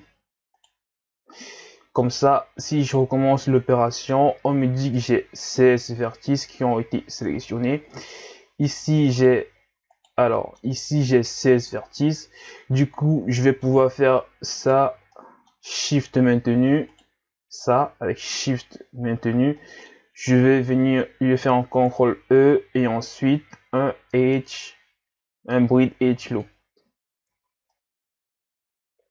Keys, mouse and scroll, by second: 1.3-2.8 middle drag, 2.8 alt+right click, 3.4-6.4 middle drag, 7.9-9.2 middle drag, 9.2 alt+right click, 9.9 alt+right click, 10.3-14.6 middle drag, 14.6 alt+right click, 15.1-16.9 middle drag, 16.9 alt+shift+right click, 19.6-21.8 middle drag, 21.8 ctrl+e, 27.3 Tab, 27.7-29.1 middle drag.